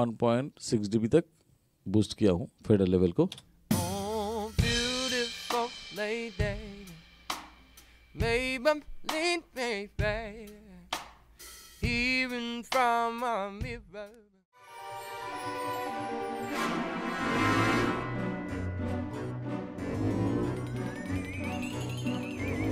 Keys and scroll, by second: 3.4 space.